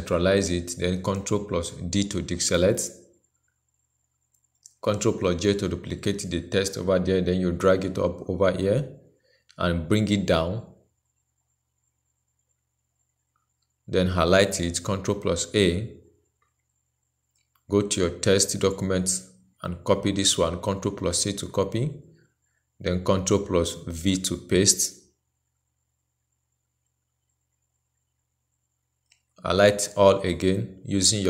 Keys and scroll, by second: 1.4 ctrl+d, 5.4 ctrl+j, 14.4 ctrl+a, 20.2 ctrl+c, 23.7 ctrl+v, 30.9 ctrl+a.